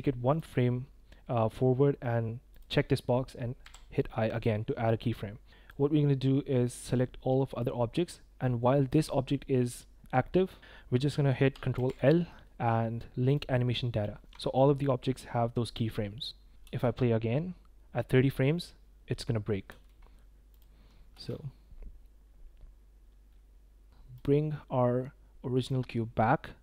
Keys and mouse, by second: 0.3-2.6 drag, 3.6 i, 5.5 click, 5.5 space, 6.6-7.6 drag, 11.7 ctrl+l, 14.2 shift+click, 14.4 drag, 16.6 space, 19.6 space, 21.1 space, 24.1 click, 25.6-26.6 drag.